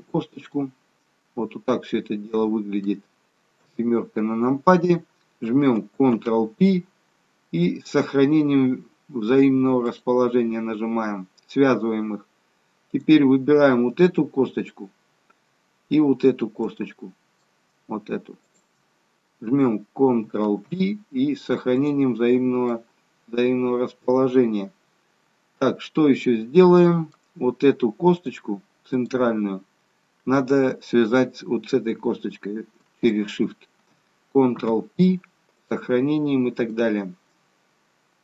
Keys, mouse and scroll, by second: 0.3 shift+click, 0.5 middle click, 3.6 KP_7, 6.1 ctrl+p, 12.9 click, 16.7 middle click, 18.5 shift+click, 20.4 ctrl+p, 22.7 middle click, 28.1 click, 29.0 click, 33.0 shift+click, 34.5 ctrl+p, 36.7 middle click.